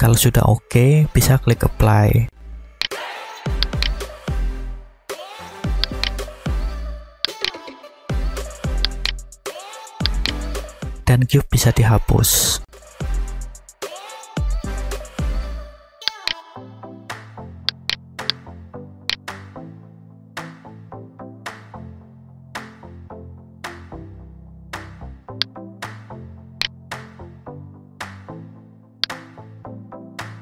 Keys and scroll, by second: 13.0 Delete, 20.2 Tab, 21.5 alt+a, 23.4 a, 24.2 Tab, 28.2 Tab.